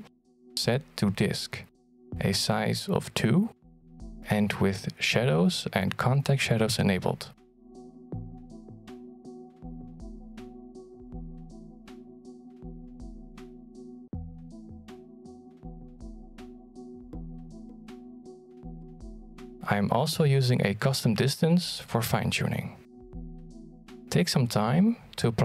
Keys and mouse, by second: 3.8-4.2 middle drag, 4.6 g, 6.0 middle click, 7.5 shift+middle click, 7.7 middle click, 8.3 g, 9.2 r, 10.2-10.9 middle drag, 11.1 r, 11.7 g, 13.6 g, 16.4 click, 16.9 click, 17.8 click, 20.6 click, 22.3-25.4 drag.